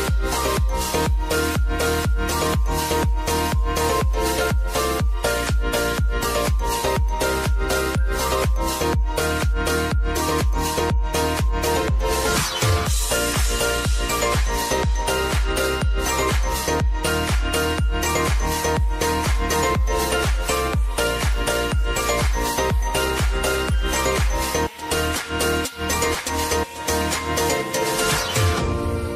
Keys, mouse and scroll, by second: 13.0 space, 15.3 space, 15.6 click, 22.5 click, 27.9 ctrl+alt+Home.